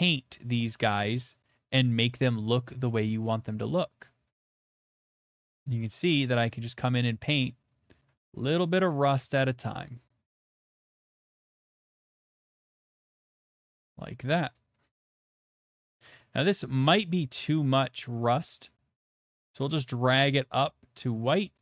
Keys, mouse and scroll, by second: 0.6 click, 1.4-2.2 shift+middle click, 1.7 middle click, 2.0 middle click, 3.2 click, 3.9 middle click, 4.4 click, 4.4 middle click, 4.7 click, 5.3 click, 5.3 middle click, 5.6 click, 6.1 middle click, 6.5 click, 8.1 middle click, 8.7 click, 8.9 middle click, 10.4 click, 10.7 middle click, 11.0 click, 11.3 middle click, 11.5 click, 11.8 middle click, 12.1 click, 12.4 middle click, 12.7 click, 12.9 middle click, 13.2 shift+middle click, 13.5 middle click, 13.8 shift+middle click, 14.6 shift+middle click, 15.2 click, 15.9 middle click, 16.9 middle click, 18.2 click, 20.3 click, 20.7 middle click.